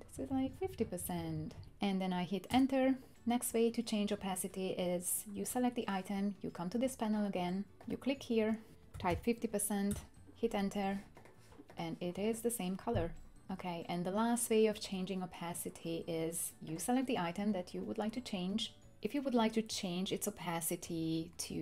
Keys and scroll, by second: 0.0 Down, 0.1 Down, 0.3 Down, 0.4 Down, 0.6 Down, 0.8 Down, 1.0 Down, 1.1 Down, 1.3 Down, 2.5 Return, 8.9 typing, 9.9 Return.